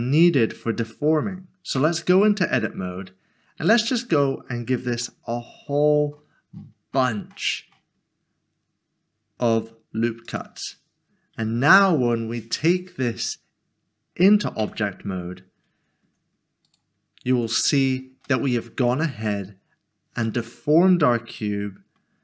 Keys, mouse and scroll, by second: 1.8 Tab, 2.8 scroll up 1, 3.5 scroll down 1, 4.1 scroll up 1, 4.9 ctrl+r, 5.6 scroll up 1, 10.3 click, 14.6 Tab, 16.6 right click, 17.3 Tab, 18.3 middle click.